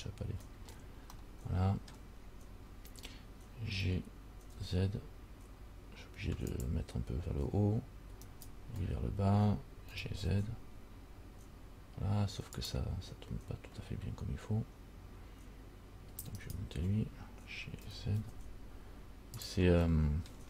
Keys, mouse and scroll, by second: 0.9 scroll down 2, 1.4 middle click, 3.9 g, 8.5 alt+right click, 10.1 g, 16.6 alt+right click, 18.0 g, 20.1 middle click.